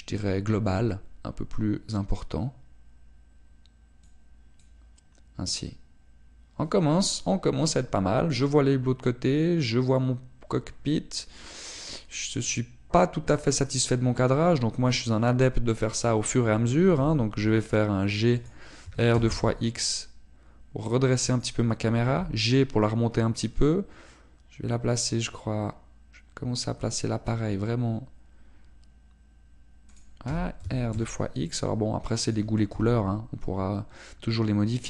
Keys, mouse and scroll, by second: 12.9 click, 16.9 right click, 17.9 g, 19.5 click, 19.9 r, 22.4 click, 23.1 g, 31.0 click, 31.3 r, 33.3 click, 33.7 g.